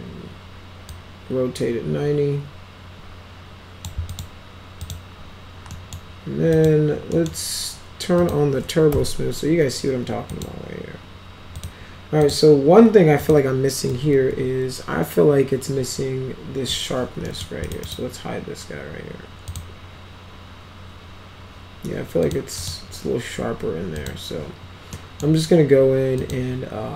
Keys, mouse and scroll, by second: 0.8-3.7 drag, 4.0 click, 4.7 click, 5.6 middle click, 6.5 click, 7.0 middle click, 8.1 click, 8.8 t, 10.2 click, 11.5 click, 12.1 click, 13.1 click, 13.8 F4, 14.2 F4, 17.2 middle click, 17.6 click, 17.8 right click, 19.4 click, 22.2 click, 22.5 click, 23.9 click, 24.8 middle click, 26.1 click.